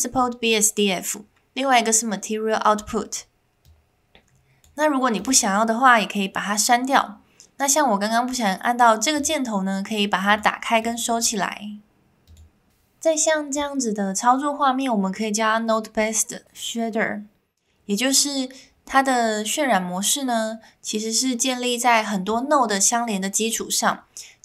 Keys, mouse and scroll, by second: 3.6 click, 5.2 click, 9.2 click, 10.3 click, 10.8 click, 12.2 click.